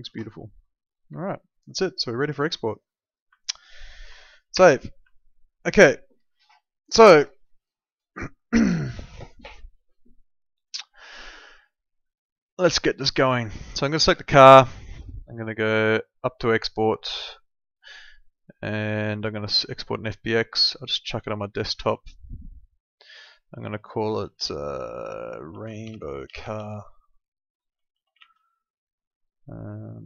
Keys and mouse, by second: 0.0 ctrl+z, 0.4 alt+middle click, 1.2 alt+middle click, 2.1 middle click, 2.6 alt+middle click, 3.0 click, 3.4 alt+middle click, 4.5 ctrl+s, 5.1 alt+middle click, 14.0 click, 20.6 click, 25.2-28.7 typing.